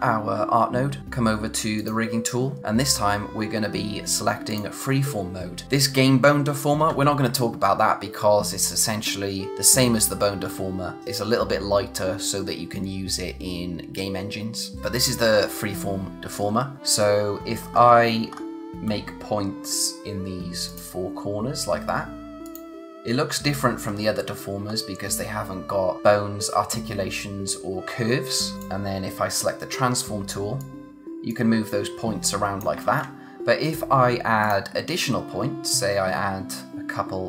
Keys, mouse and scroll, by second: 1.8 click, 4.5 click, 16.6 scroll up 1, 17.6-18.3 scroll down 1, 18.3-19.5 scroll up 1, 20.7 click, 23.3-23.7 scroll up 1, 23.7-24.7 scroll down 1, 24.7-26.0 scroll up 1, 28.5 click, 30.6 click, 31.0 z, 31.3 click, 32.8 ctrl+z, 34.4 click, 36.7 click.